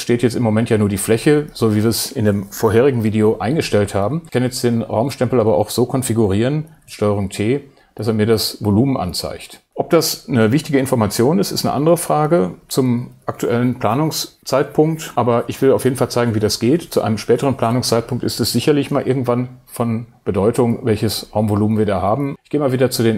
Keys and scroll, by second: 6.7 super+t.